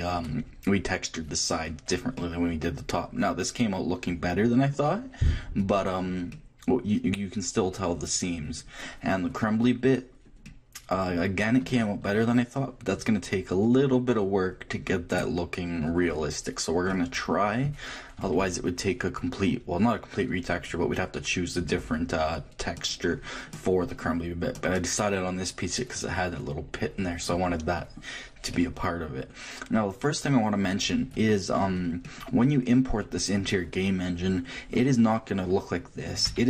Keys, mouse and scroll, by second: 4.2 middle click, 5.5 middle click, 5.9-8.2 middle drag, 8.7-11.3 middle drag, 12.0 shift+middle click, 15.1-18.7 middle drag, 27.0-34.4 middle drag.